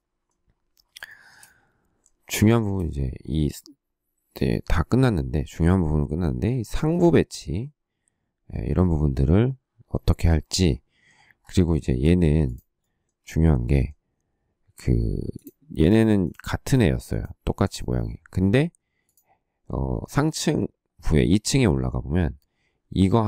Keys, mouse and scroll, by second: 2.4 shift+middle click, 2.5 shift+middle click, 11.6 shift+middle click.